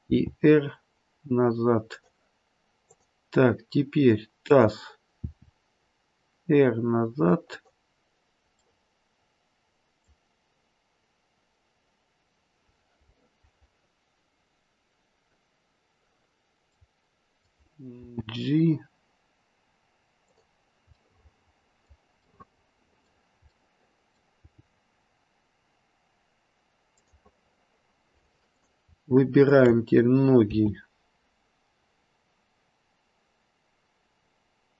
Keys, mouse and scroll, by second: 0.0 r, 2.8 click, 4.4 click, 5.1 r, 8.6 middle click, 17.0 middle click, 17.9 g, 20.9 middle click, 22.2 middle click, 23.4 middle click, 23.5 middle click, 24.0 middle click, 24.3 g, 28.5 click, 29.4 shift+click, 30.4 g.